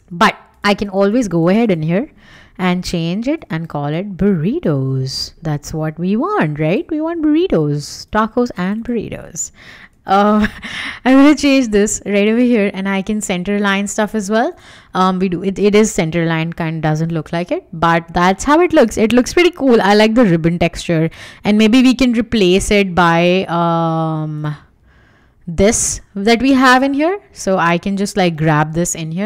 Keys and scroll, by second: 2.6-5.5 typing, 9.4-10.9 typing, 17.0 w, 28.7 super+c.